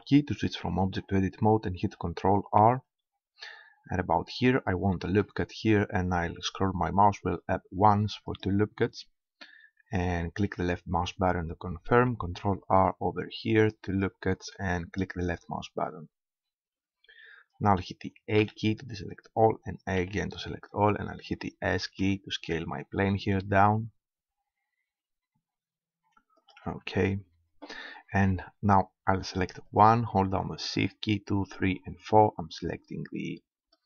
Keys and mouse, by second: 2.6 ctrl+r, 8.4-10.3 drag, 12.1 ctrl+r, 14.0-15.8 drag, 18.4 a, 20.0 a, 21.7 s, 26.5-28.3 drag, 29.7-33.8 middle drag.